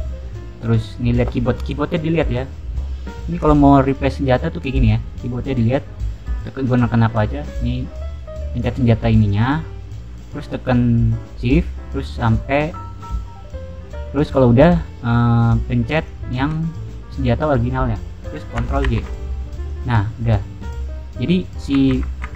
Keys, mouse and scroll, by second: 8.5 click, 9.1 click, 15.9 shift+click, 18.8 ctrl+j, 19.6 click, 19.9 middle click, 21.9 ctrl+z, 22.1 ctrl+z.